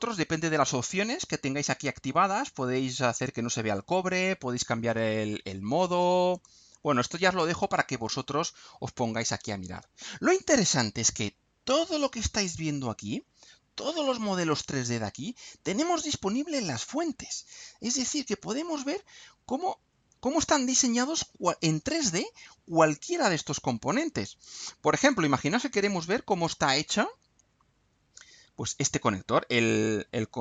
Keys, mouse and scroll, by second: 0.4 click, 6.3 click, 7.1-10.3 drag, 20.4-21.0 drag, 24.4-25.3 drag, 25.6-26.3 drag, 27.4-27.8 scroll up 1, 28.2-30.4 scroll down 1.